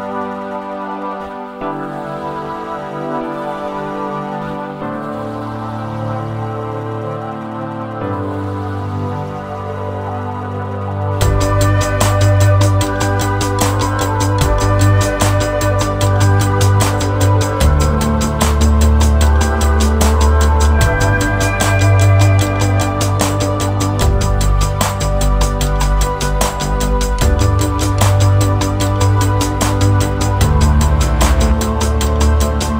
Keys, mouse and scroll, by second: 0.2 click, 0.6 click, 1.5 scroll up 1, 1.9 middle click, 4.4-5.1 scroll down 3, 5.6 click, 6.0 click, 9.4 space, 9.8 middle click, 11.6-12.0 scroll up 4, 12.0-12.6 scroll down 2, 12.4 click, 13.6 shift+middle click, 14.6 click, 15.1 click, 17.5 middle click, 19.2 middle click, 23.2 space, 24.0 click, 25.0 shift+middle click, 26.2-27.2 scroll down 1, 27.2 scroll down 1, 27.2 shift+middle click, 28.5 click.